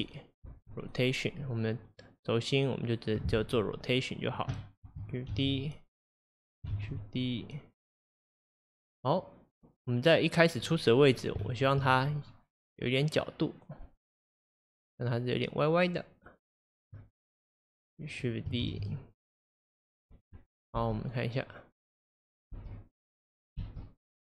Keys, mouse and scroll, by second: 1.9-5.4 drag, 5.4 shift+d, 6.8 shift+d, 9.8-13.2 drag, 11.2-11.5 scroll down 2, 11.5-11.9 shift+middle drag, 11.9-12.7 scroll up 1, 17.6-18.7 drag, 18.7 shift+d, 20.8 space, 22.6 space, 23.0-23.4 scroll down 2, 23.6 space.